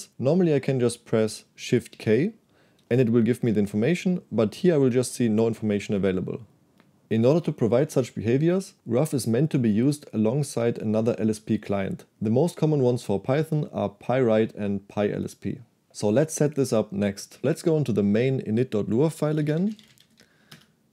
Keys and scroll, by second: 2.0 shift+k, 19.2-20.6 typing.